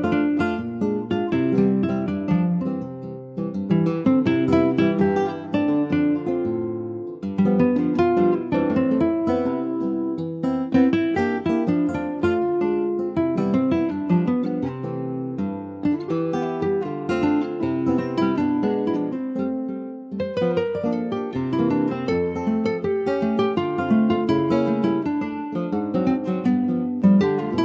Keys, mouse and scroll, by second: 0.3 middle click, 0.9 /, 1.5 click, 2.3 ctrl+s, 2.4 click, 2.7 middle click, 3.4 ctrl+a, 4.8 ctrl+s, 4.9 click, 5.3 click, 6.4 shift+d, 7.4 s, 10.9 click, 11.1 scroll down 2, 11.4 middle click, 12.2 ctrl+s, 12.4 shift+middle click, 13.3 ctrl+s, 13.5 click, 14.0 shift+click, 14.5 shift+click, 15.6 ctrl+j, 16.0 click, 16.3-17.5 middle drag, 17.5 ctrl+s, 17.7 ctrl+click, 18.0 ctrl+a, 18.7 click, 19.2 ctrl+s, 19.5 scroll up 2, 20.0 shift+middle click, 20.4 middle click, 20.7 scroll up 1, 20.9 click, 21.2 Tab, 21.4 scroll up 1, 21.7 shift+middle click, 22.1 click, 23.1 l, 23.6 scroll down 2, 24.0 alt+middle click, 24.5 alt+middle click, 25.3 ctrl+s, 25.8 s.